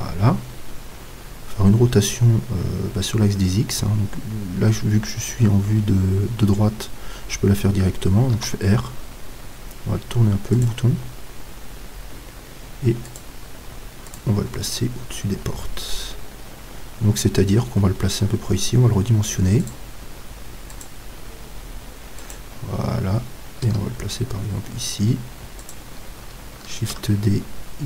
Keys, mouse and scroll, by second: 6.9-10.7 middle drag, 8.4 r, 10.7-13.2 drag, 11.9-13.2 middle drag, 18.8 s, 23.6 g, 25.7-27.6 drag, 26.8 shift+d.